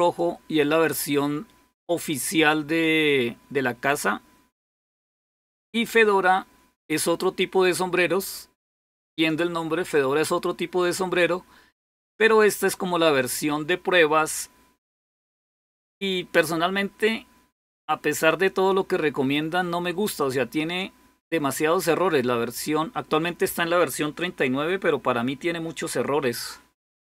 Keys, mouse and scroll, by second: 1.4-2.1 typing, 16.6-19.4 drag, 20.0-23.8 drag.